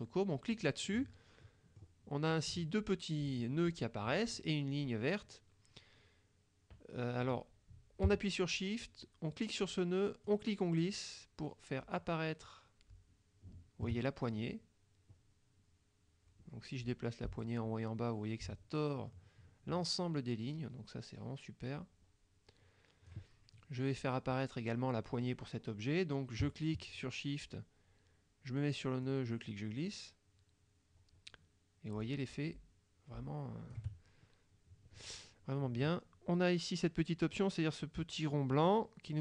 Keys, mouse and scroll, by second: 0.6 click, 1.5 middle click, 2.3 click, 3.5 click, 10.3-23.3 shift+drag, 29.1-34.0 shift+drag, 38.8-39.2 drag.